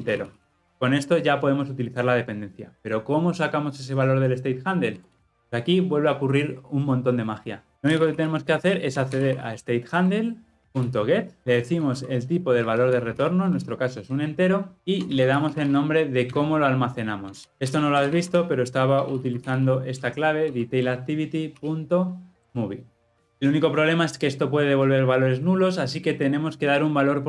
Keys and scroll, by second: 0.7 ctrl+alt+o, 4.9 Tab, 7.7 Return, 10.0 Return, 20.8 Return.